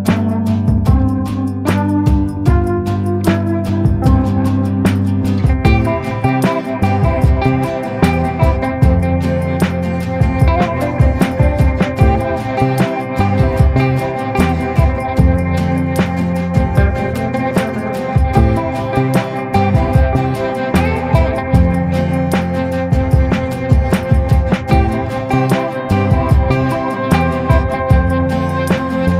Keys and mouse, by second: 0.9 click, 1.4 ctrl+z, 1.6 ], 1.9 [, 2.2 [, 2.4 [, 2.5 click, 5.2-8.5 drag, 8.9 click, 9.1 click, 9.6 ctrl+z, 10.9 ctrl+z, 11.3 ctrl+z, 11.6 click, 12.0 ctrl+z, 13.6 ctrl+z, 14.9 ctrl+z, 17.3 middle click, 17.8-19.1 middle drag, 19.3 middle click, 20.7 middle click, 21.2-23.0 middle drag, 23.2 middle click, 24.3 shift+middle click, 25.4-28.3 middle drag, 28.5 shift+middle click.